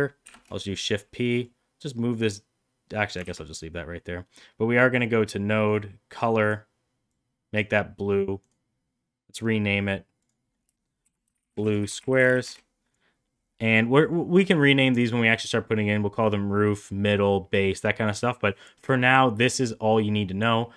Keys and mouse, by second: 0.2 shift+p, 1.4-3.0 drag, 3.2 ctrl+z, 5.6 click, 6.1 click, 8.3-13.0 right drag, 14.2 middle click, 14.7 middle click, 17.7 middle click.